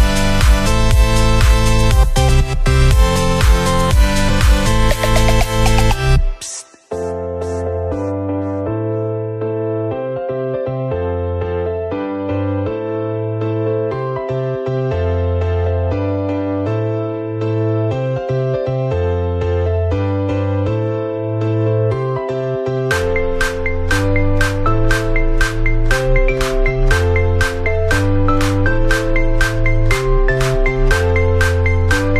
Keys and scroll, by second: 4.3 ctrl+[, 4.5 Down, 5.6 ctrl+[, 6.1 Down, 8.2 Up, 8.4 ctrl+[, 8.5 Down, 9.1 ctrl+-, 11.9 Left, 13.6 ctrl+-, 18.2 Up, 19.8 ctrl+=, 21.9 Up, 22.9 Left, 32.0 ctrl+[.